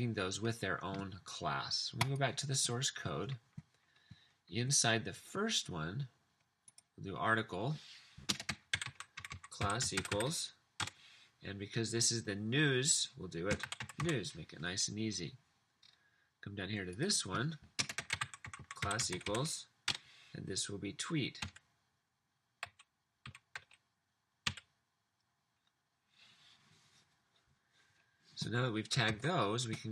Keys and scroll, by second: 8.2-10.8 typing, 13.3-14.4 typing, 17.7-19.6 typing, 19.9 Left, 21.5-24.4 typing, 29.2 super+s.